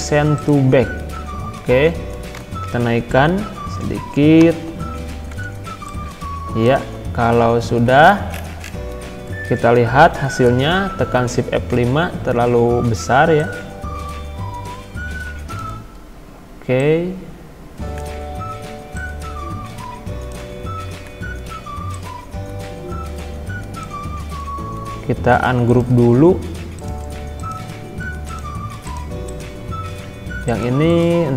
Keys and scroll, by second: 2.4 Up, 4.4 Down, 7.4 ctrl+z, 10.3 shift+F5, 11.8 Escape.